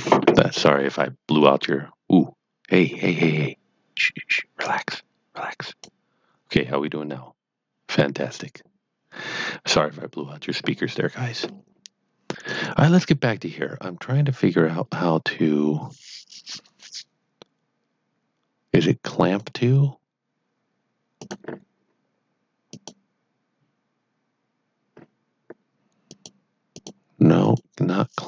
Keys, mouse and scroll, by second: 4.6 click, 4.9 click, 12.4 click, 14.9 click, 19.2 click, 26.0 click.